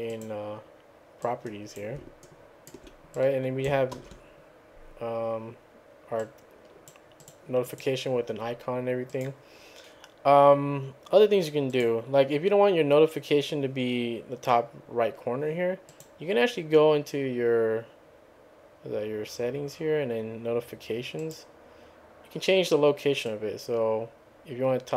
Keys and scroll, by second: 4.0 ctrl+v.